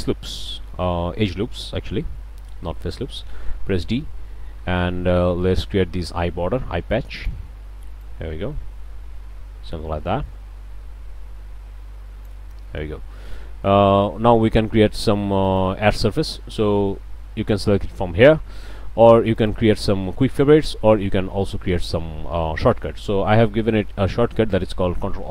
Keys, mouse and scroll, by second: 0.3 shift+click, 0.5 shift+scroll up 1, 2.5 d, 3.2-7.5 drag, 8.0-12.4 drag, 12.5 click, 12.8 click, 13.1 click, 13.3 middle click, 15.4 right click, 19.4-19.7 right drag, 23.5-24.1 right drag.